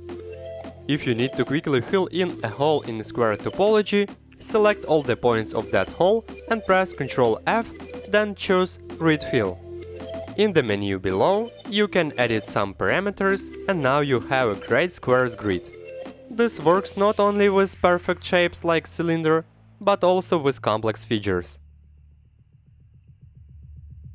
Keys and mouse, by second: 0.7-1.0 middle drag, 1.5 middle click, 2.0 Tab, 5.3 click, 6.4 middle click, 7.9 ctrl+f, 11.8 click, 12.3 click, 12.4 click, 12.6 click, 13.5 click, 13.7 click, 15.0 middle click, 15.7 Tab, 16.1-17.1 middle drag, 17.5 middle click, 18.0 Tab, 18.3 2, 18.6 shift+click, 19.2 click, 20.0 ctrl+f, 21.3 Tab, 21.5 click, 21.6-22.7 middle drag, 22.9 middle drag.